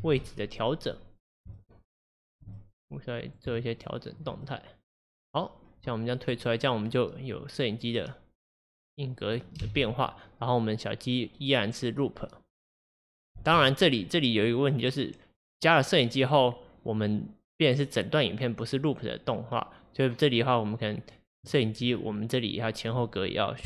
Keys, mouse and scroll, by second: 0.9-1.6 drag, 1.6-6.4 shift+middle drag, 6.4-9.7 drag, 9.7 space, 13.4 space, 14.1-17.1 drag, 21.9-22.2 scroll down 2, 22.2-22.7 scroll up 1, 22.7 click.